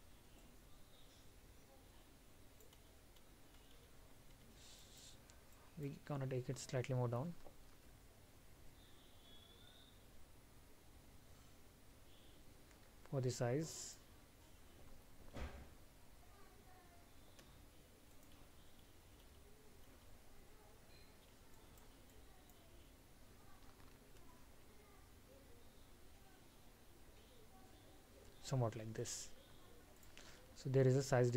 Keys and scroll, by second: 4.9 alt+む.